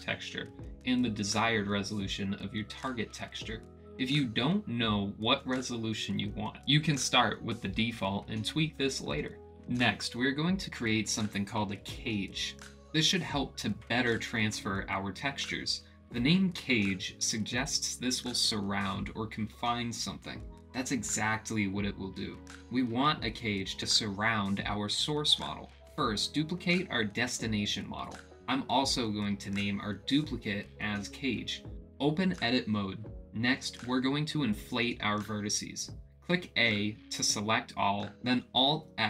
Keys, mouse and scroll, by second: 27.0 ctrl+c, 27.7 ctrl+v, 29.9-31.7 drag, 33.3 click, 34.2 Tab, 35.4 a, 38.4 click.